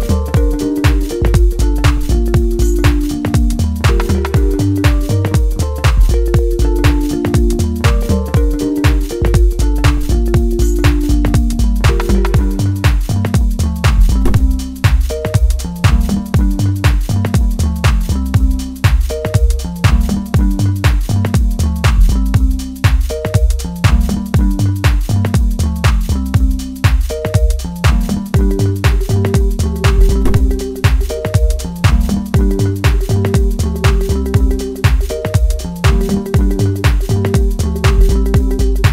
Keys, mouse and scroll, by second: 0.5 click, 4.8 click, 6.4-8.3 middle drag, 8.3-12.9 drag, 13.0-16.2 drag, 16.2-17.7 middle drag, 17.7-18.1 scroll down 1, 18.1-20.4 middle drag, 20.4 click, 23.1 click, 25.3 middle click, 26.4 scroll up 1, 26.7-29.4 middle drag, 29.4-33.9 drag, 33.9-34.4 scroll down 1, 34.4-38.9 middle drag.